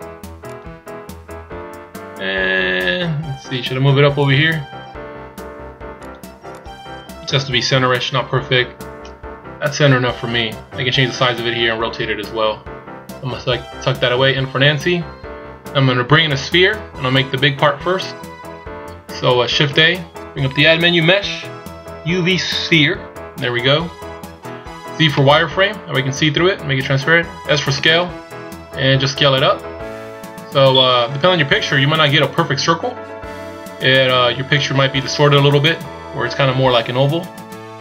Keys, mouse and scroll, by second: 0.6 click, 4.3 click, 6.1 click, 6.6 click, 14.4 n, 19.8 shift+a, 25.2 z, 27.8 s, 37.7 s.